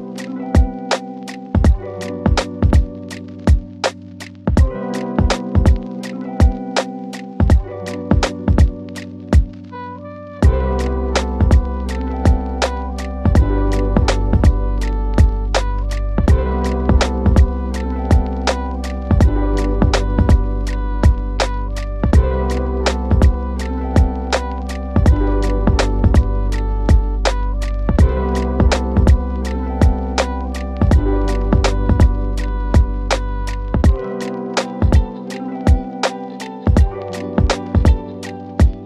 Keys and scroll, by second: 9.2 ctrl+r, 11.6 ctrl+r, 37.1 c.